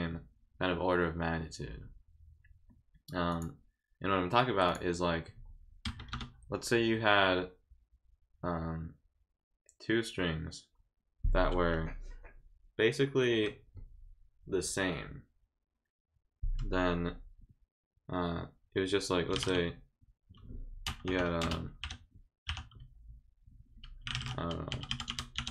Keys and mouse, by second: 3.3 click, 4.7 click, 19.1-19.9 typing, 23.9-24.7 typing.